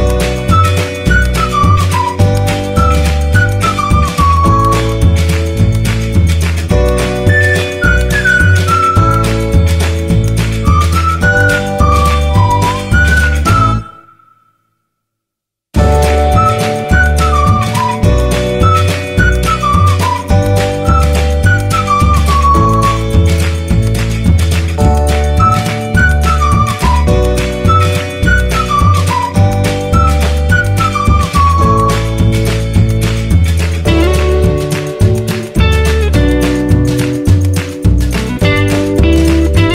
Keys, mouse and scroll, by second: 2.1-7.4 drag, 7.4 ctrl+t, 9.7 alt+click, 10.3 Right, 13.8 Return, 17.8-29.6 drag, 33.4 alt+right click, 37.5 shift+p.